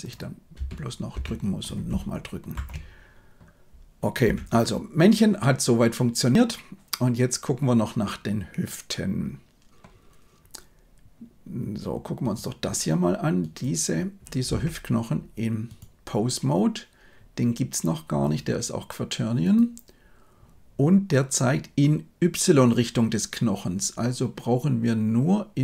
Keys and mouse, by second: 0.4 space, 1.0 space, 2.4 shift+Left, 4.1 KP_1, 14.4 Tab, 18.4-19.5 drag.